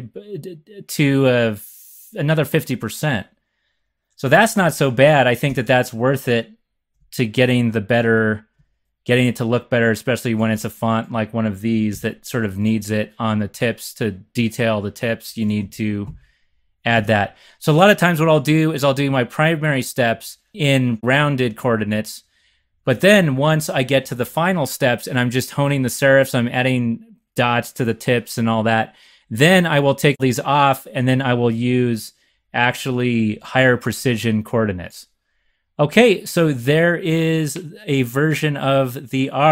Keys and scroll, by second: 5.0 x, 5.4 x, 11.8 shift+super+c, 15.6 x, 16.0 x, 16.9 super+s.